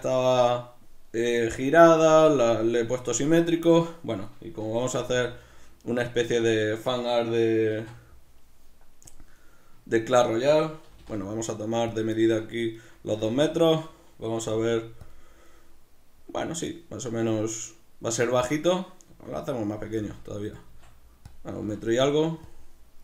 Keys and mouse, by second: 6.4 click, 7.8 shift+a, 9.8-12.0 ctrl+middle drag, 10.9 g, 12.0 click, 12.2 shift+middle click, 12.8 right click, 13.2 z, 15.2 click, 19.1 s, 19.8 click, 19.9 g, 20.7 s, 21.4 click, 21.6 g, 22.6 click.